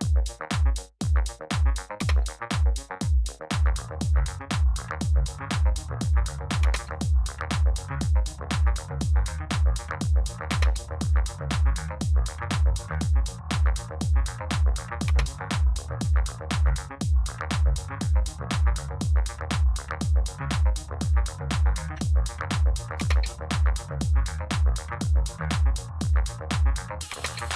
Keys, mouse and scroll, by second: 1.9 space, 6.5 space, 10.4 space, 15.0 space, 22.9 space, 27.0 space.